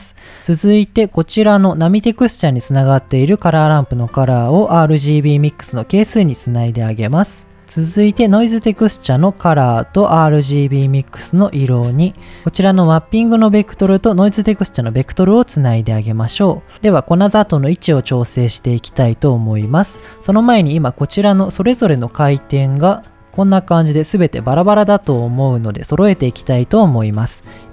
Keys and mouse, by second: 1.1 middle click, 3.1-5.3 drag, 7.1 middle click, 9.3-11.2 drag, 11.9 middle click, 13.1-14.7 drag, 24.0 click, 24.5 click, 24.9 click, 25.2 click.